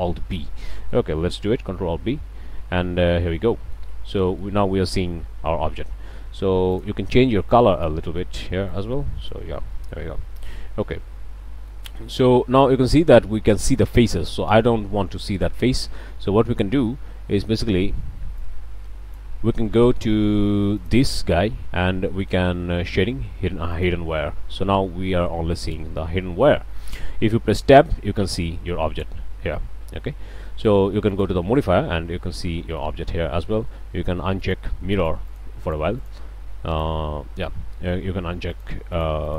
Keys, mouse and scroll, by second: 0.7-1.1 drag, 1.9 ctrl+alt+b, 3.1-3.9 drag, 3.9 scroll down 2, 4.2-4.6 drag, 4.6 scroll down 2, 6.7 drag, 7.7 click, 8.7 click, 9.7 middle click, 9.7-10.1 drag, 10.5-11.8 shift+drag, 18.7 click, 20.8 click, 23.7 click, 24.3-25.0 scroll down 3, 25.1-26.2 middle drag, 26.3 scroll up 1, 26.6-27.1 shift+middle drag, 27.7 Tab, 29.5 Tab, 31.1 click, 32.5 click, 32.7 middle click, 34.5 middle click, 34.9 middle click, 35.5 middle click, 35.6 middle click, 36.0 middle click, 36.7 click, 38.5 click, 38.9 click.